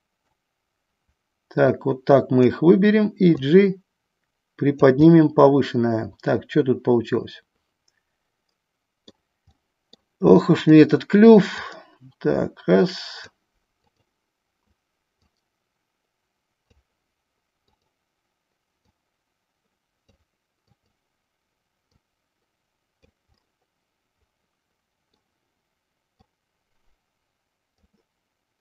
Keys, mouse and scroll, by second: 2.1 click, 3.5-4.9 drag, 5.3-9.3 middle drag, 9.7 middle click, 10.7 click, 11.8-13.6 drag, 14.0 click, 15.3-17.0 drag, 19.1-20.3 drag, 21.0 click, 22.1-23.2 drag, 23.6-25.4 middle drag, 26.4-27.9 drag.